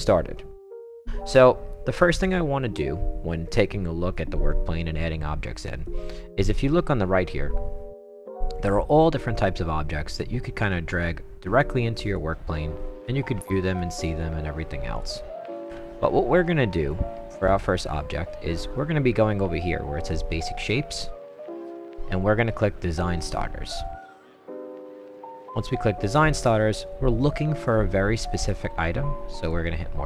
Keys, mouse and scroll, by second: 2.3-4.1 right drag, 4.4-5.6 right drag, 5.8-6.4 right drag, 10.7 click, 12.1-13.8 right drag, 14.9 click, 16.9-17.8 right drag, 20.4 click, 24.7 click, 26.3 middle click, 26.4 middle click, 27.2 middle click, 29.4 click.